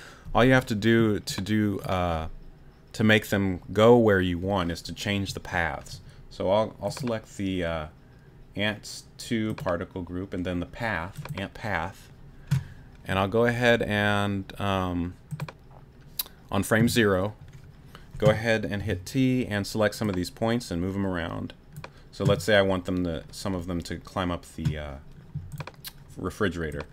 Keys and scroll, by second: 18.8 t.